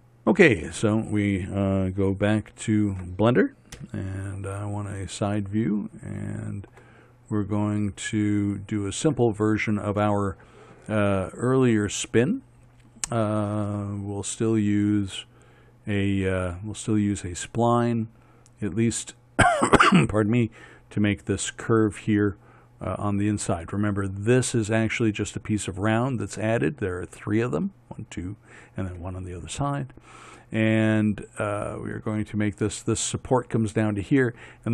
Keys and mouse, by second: 4.2 KP_1, 4.5-5.9 middle drag, 6.0 middle click.